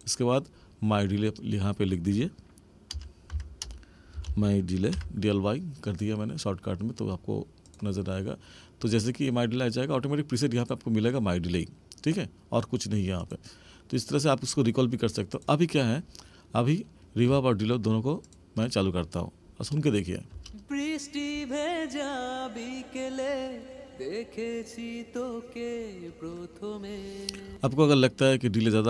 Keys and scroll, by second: 3.6 space, 20.3 space, 27.4 space.